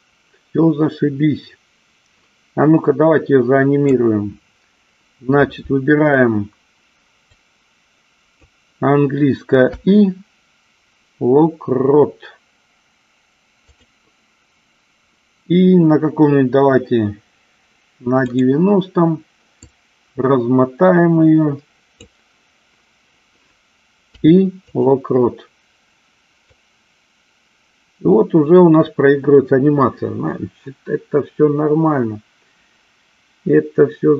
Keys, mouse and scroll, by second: 7.5-8.7 drag, 9.8 i, 18.5 click, 19.8-22.2 drag, 24.3 i, 26.7-34.1 drag.